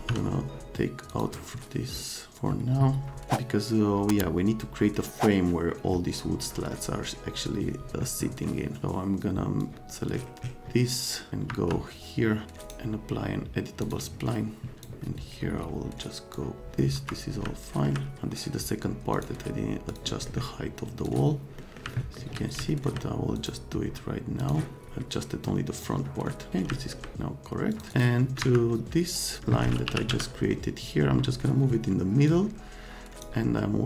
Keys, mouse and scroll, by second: 0.0 n, 1.1 click, 9.6 click, 10.3-11.9 middle drag, 11.5 F3, 11.8 click, 12.6 scroll down 2, 13.8 click, 14.7 click, 16.4 click, 16.9 F3, 17.4 middle click, 19.1 click, 19.9 click, 20.3 middle click, 21.0 click, 21.6 middle click, 22.0 right click, 22.7 right click, 23.3 click, 24.4 click, 25.8 click, 26.5 middle click, 26.7 middle click, 27.7 click, 27.9 click, 28.4 F3, 29.6-30.6 typing, 30.3 scroll up 2, 32.2-33.2 drag.